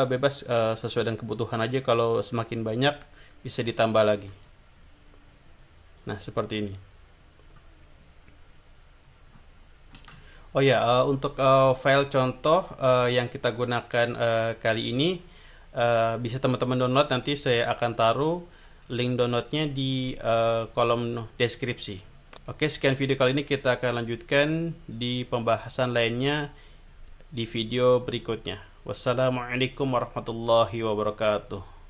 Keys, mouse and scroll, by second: 4.4 click, 6.0 click, 7.4-9.1 scroll down 3, 9.3-10.1 scroll up 2, 12.0 click, 13.0 click.